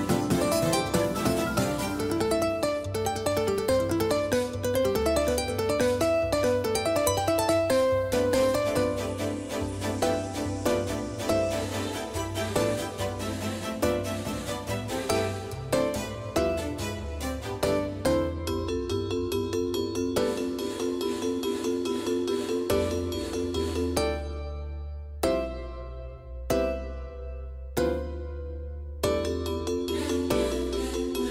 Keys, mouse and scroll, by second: 15.4-18.1 middle drag, 23.0-25.0 scroll up 1, 25.0-27.0 scroll up 1.